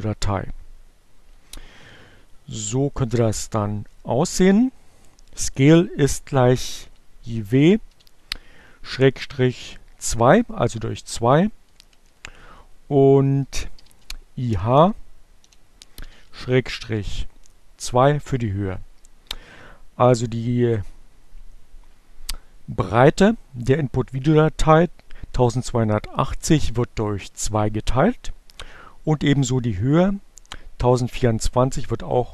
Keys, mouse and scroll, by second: 0.0 Delete, 2.0-4.6 typing, 5.7 Right, 7.0 Delete, 7.6 i, 9.0 g, 9.2 BackSpace, 9.8 shift+h, 11.2 2.